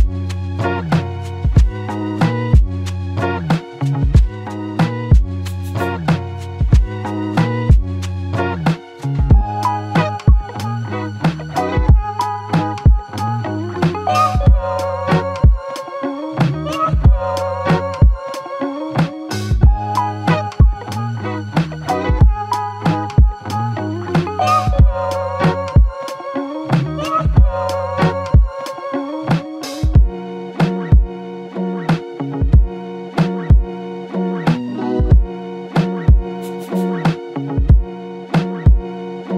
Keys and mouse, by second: 0.2 ctrl+click, 2.2 ctrl+click, 4.9 ctrl+i, 5.1 ctrl+click, 8.6 w, 10.2 alt+click, 21.1 ctrl+click, 23.7 alt+click, 25.2 q, 26.3-27.1 typing, 34.0 ctrl+click.